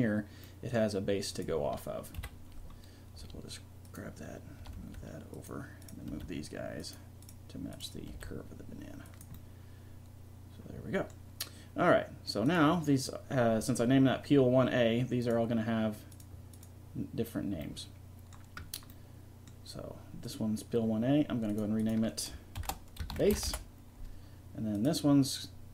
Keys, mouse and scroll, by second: 0.5 click, 1.8 click, 2.2 KP_1, 3.2 r, 4.6 r, 5.9 right click, 6.1 g, 8.2 g, 9.4 click, 12.6-15.1 right drag, 15.2-17.9 right drag, 17.9 middle click, 18.2 click, 20.4-23.5 drag, 24.8-25.7 drag.